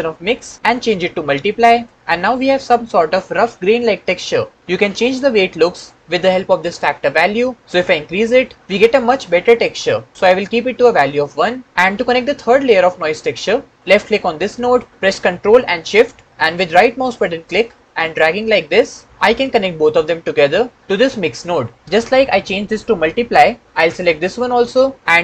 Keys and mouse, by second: 0.1-1.7 drag, 7.7-10.1 drag, 14.5 click, 16.9-19.2 ctrl+shift+drag, 24.1 click.